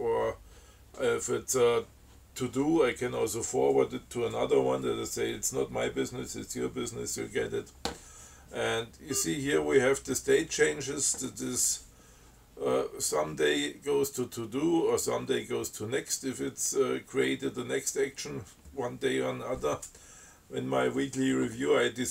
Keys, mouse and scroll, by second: 9.3 scroll up 2.